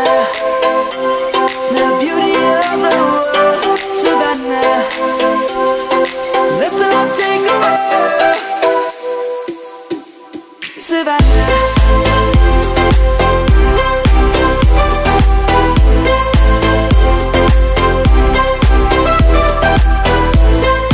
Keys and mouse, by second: 0.2 middle click, 0.8 click, 1.0 Tab, 2.3 click, 3.6 click, 4.5 middle click, 5.8 i, 8.1 click, 11.7 click, 12.7 middle click, 14.2 click, 16.7 middle click.